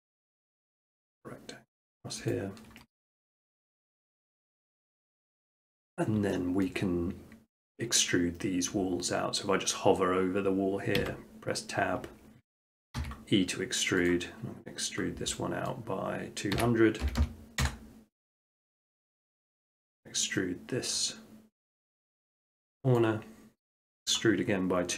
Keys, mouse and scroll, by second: 0.9 middle click, 2.3 click, 3.2 middle click, 3.4 Tab, 3.7 middle click, 3.8 middle click, 4.3 shift+middle click, 4.4 shift+middle click, 4.7 middle click, 6.2 middle click, 6.7 shift+middle click, 7.0 middle click, 7.3 middle click, 7.3 shift+middle click, 7.8 middle click, 8.0 middle click, 11.0 Tab, 13.0 e, 14.3 click, 15.7 scroll, 16.1 middle click, 16.6-17.1 typing, 17.8 Return, 19.0-20.2 drag, 21.0-22.1 middle drag, 23.0-24.1 drag, 24.2 click, 24.8-24.9 scroll.